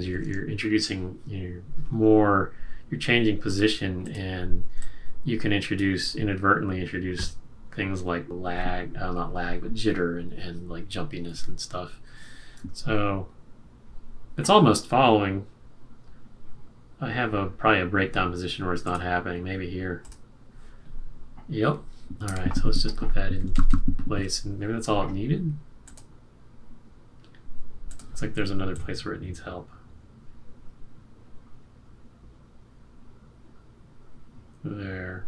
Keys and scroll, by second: 12.5 Return, 22.2 F6, 23.3 F6, 23.4 shift+Up, 23.5 shift+Up, 23.6 shift+Up.